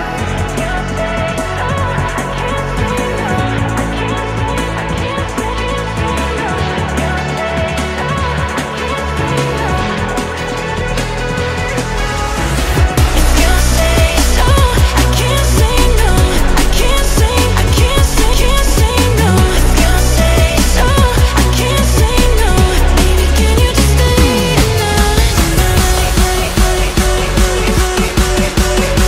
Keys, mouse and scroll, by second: 0.3 g, 2.8-3.4 middle drag, 3.4 click, 4.4 r, 5.8 middle click, 6.5 g, 7.4 g, 9.3-11.6 middle drag, 11.6 r, 13.8 click, 14.1-15.4 middle drag, 15.4 click, 15.6-16.7 middle drag, 16.7 r, 19.2 click, 19.5-20.0 middle drag, 20.0 scroll down 1, 20.3-21.4 middle drag, 21.4-22.0 scroll up 2, 22.0 click, 23.1 r, 24.3-24.8 middle drag, 24.8 click, 25.1-26.1 middle drag, 26.1 shift+d, 27.3 middle click, 27.8 g.